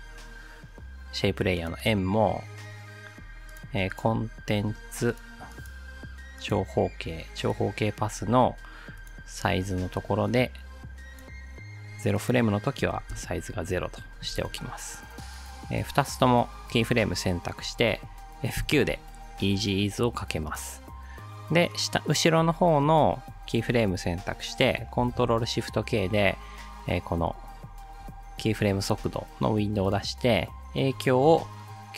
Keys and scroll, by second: 12.9 0, 13.1 Return, 15.4 space, 18.6 F9, 25.0 ctrl+shift+k.